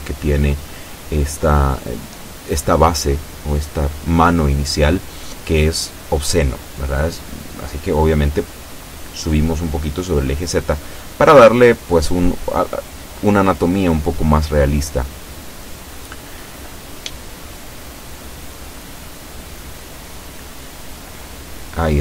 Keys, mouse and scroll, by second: 2.9 a, 3.8 b, 4.6-5.7 drag, 6.4-9.3 drag, 9.4-11.4 middle drag, 11.6 middle click, 12.4-14.8 middle drag, 14.8 scroll up 1, 15.6 KP_7, 18.5 a, 19.1-22.0 middle drag.